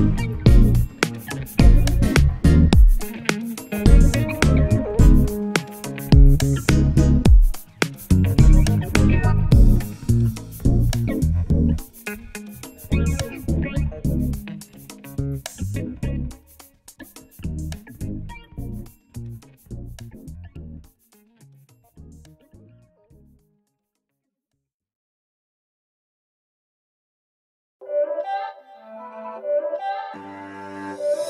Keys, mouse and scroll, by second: 1.4 z, 1.8 click, 6.4 z, 6.9-8.5 drag, 9.1-16.0 drag, 16.5 2, 17.2 click, 20.1 click, 24.0-25.9 drag.